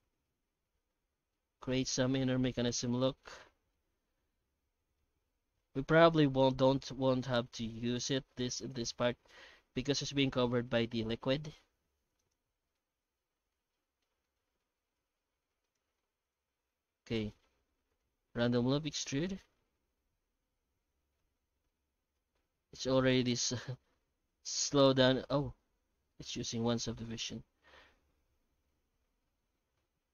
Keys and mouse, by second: 0.2 Tab, 0.6 middle click, 1.6-2.9 shift+middle drag, 3.2-4.4 shift+middle drag, 4.8 ctrl+r, 9.5 shift+middle click, 10.4 ctrl+r, 12.7-14.0 middle drag, 14.2 shift+middle click, 14.6 alt+a, 15.5 3, 15.6 right click, 15.9 q, 16.5 Tab, 17.0 middle click, 17.3 shift+q, 26.3 middle drag, 26.7 shift+middle drag, 27.0 alt+shift+z, 28.0 F9.